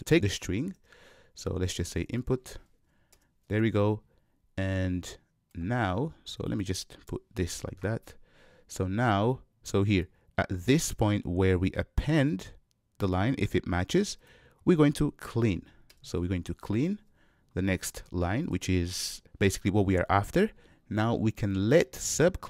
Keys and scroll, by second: 3.2 shift+super+Return, 15.9 Return.